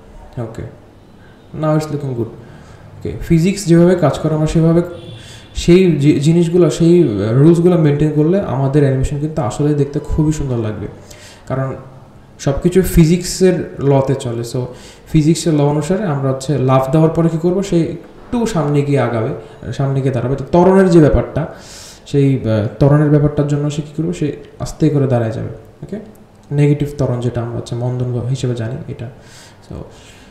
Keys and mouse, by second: 3.2 click, 4.6-7.4 drag, 8.1 g, 8.9-9.5 drag, 9.9 g, 12.5-16.4 drag, 17.3 click, 18.2 space, 21.8-22.5 drag, 24.0 click, 24.8 r, 28.7 r.